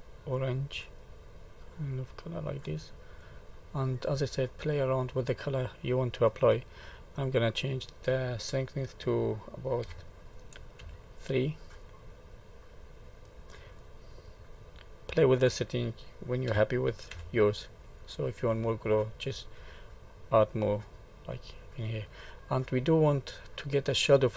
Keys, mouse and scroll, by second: 3.2 middle click, 4.1 middle click, 5.0-5.5 scroll down 2, 5.5 middle click, 7.0 click, 11.8 middle click, 15.1 click, 17.9 middle click, 22.0 middle click.